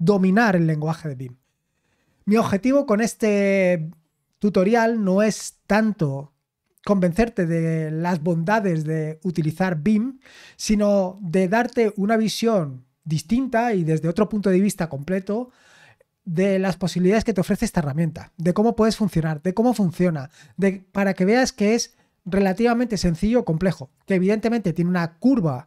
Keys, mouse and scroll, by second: 2.4-3.8 scroll down 2.